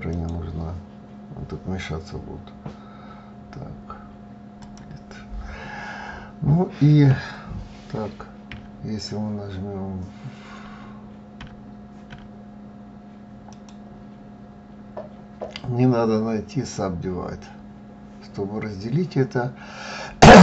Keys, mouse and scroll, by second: 8.2 w, 10.3 w, 11.1 w, 11.8 w, 13.3-20.4 right drag.